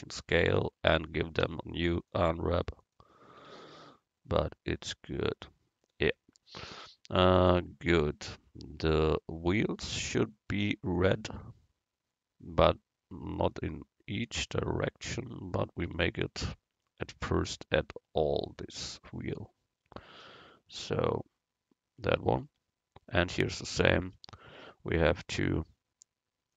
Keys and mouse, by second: 0.6 Tab, 1.5 u, 3.5 Tab, 8.9-11.8 right drag, 16.0 Tab, 18.9-20.8 drag, 22.5 Tab.